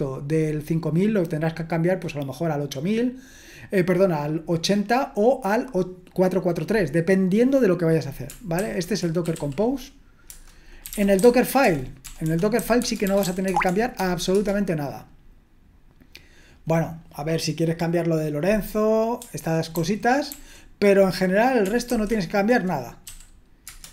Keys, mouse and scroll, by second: 9.0-14.7 typing, 10.3 Return, 19.7 ctrl+d, 20.3 ctrl+d, 21.9 typing, 23.1 typing, 23.6 Return.